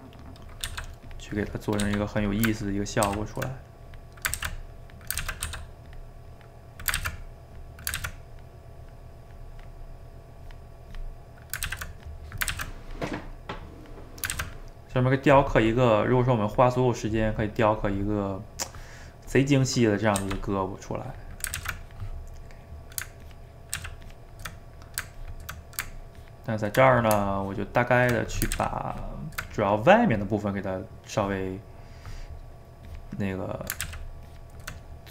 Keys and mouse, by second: 0.7 f, 1.8 f, 2.6 ctrl+click, 3.0 ctrl+z, 3.8 click, 4.4 ctrl+z, 4.7 click, 5.2 ctrl+z, 5.4 f, 6.3 click, 7.0 ctrl+z, 7.2 click, 8.0 ctrl+z, 8.3-11.6 drag, 11.6 ctrl+z, 12.0 click, 12.6 ctrl+z, 12.8-14.3 drag, 14.3 ctrl+z, 14.5-15.7 drag, 15.7 middle click, 16.5-18.1 drag, 18.1-19.2 middle drag, 19.2 click, 19.9 middle click, 20.2 f, 20.6 middle click, 21.1 click, 21.6 ctrl+z, 21.9 click, 22.4 middle click, 23.3 ctrl+click, 23.8 ctrl+z, 24.1 ctrl+click, 24.6 middle click, 25.2 ctrl+click, 25.7 middle click, 26.2 ctrl+click, 26.9 middle click, 27.4 ctrl+click, 28.2 middle click, 28.5 ctrl+z, 28.9 ctrl+click, 29.6-32.9 middle drag, 32.9 click, 33.5 middle click, 33.9 ctrl+z, 34.3 ctrl+click, 34.8-35.1 middle drag.